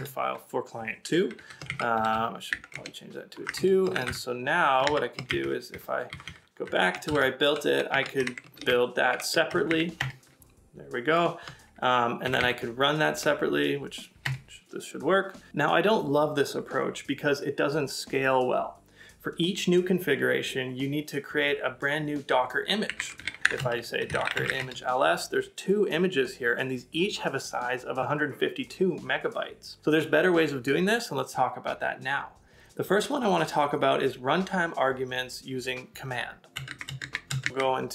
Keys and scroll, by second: 12.3 Page_Up, 14.2 Return, 22.6-23.5 typing.